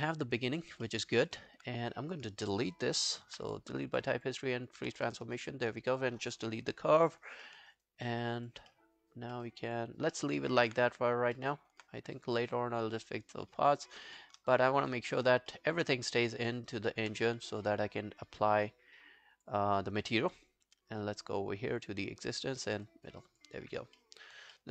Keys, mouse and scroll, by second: 0.0 alt+click, 0.9 alt+middle click, 1.1 alt+right click, 1.3 alt+click, 4.2 double click, 4.5 double click, 5.1 alt+middle click, 5.3 alt+right click, 6.5 Delete, 7.5 alt+middle click, 7.7 alt+right click, 8.1 alt+middle click, 8.4 alt+right click, 8.7 alt+middle click, 9.1 alt+scroll down 1, 9.4 alt+middle click, 9.7-10.2 alt+scroll down 6, 10.2 alt+middle click, 10.5 alt+scroll up 2, 10.9 alt+scroll down 1, 11.4 alt+middle click, 11.6 alt+scroll up 1, 12.1-13.4 alt+scroll down 1, 14.5 shift+click, 14.9 shift+click, 15.5 middle click, 16.4 middle click, 16.5 alt+middle click, 16.7 alt+right click, 20.0 right click, 23.1 scroll down 2, 23.3 alt+click, 23.6 alt+right click, 24.0 alt+middle click, 24.2 alt+right click, 24.6 alt+middle click.